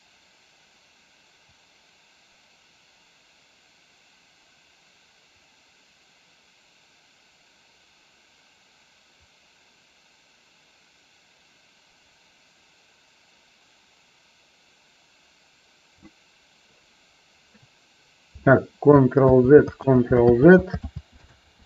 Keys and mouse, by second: 19.3 ctrl+z, 19.8 ctrl+z, 20.8 ctrl+z, 21.3 ctrl+z.